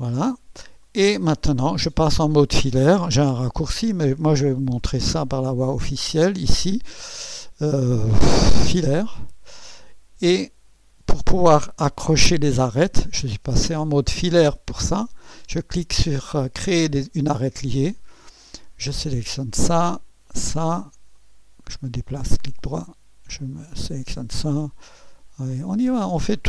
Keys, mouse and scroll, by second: 0.3 scroll up 1, 0.8 right click, 5.9 click, 8.9 click, 9.6 scroll up 1, 10.3 right click, 17.3 click, 18.8 click, 20.2 click, 21.2 right click, 23.6 click, 25.6 click.